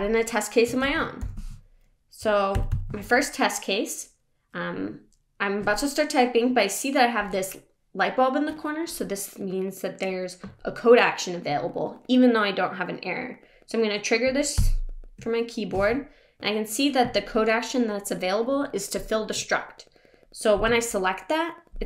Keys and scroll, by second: 2.5 Left, 2.7 Left, 14.6 super+..